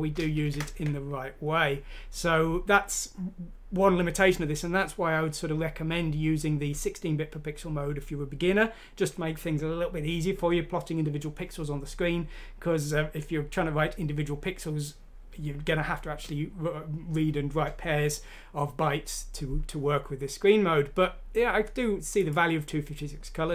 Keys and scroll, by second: 0.3 ctrl+z.